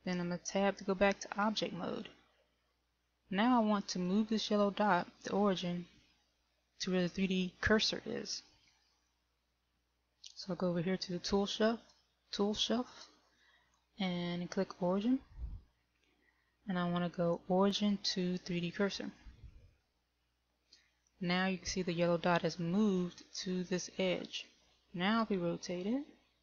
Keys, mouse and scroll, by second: 1.1 Tab, 9.1 click, 19.1 click, 25.7 r.